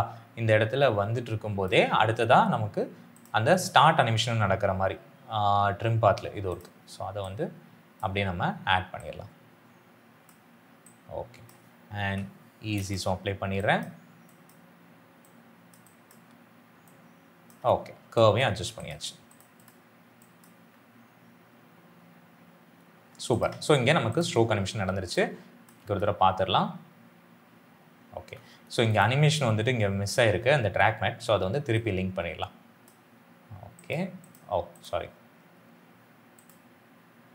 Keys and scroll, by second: 11.9 F9, 20.5 space, 25.7 space.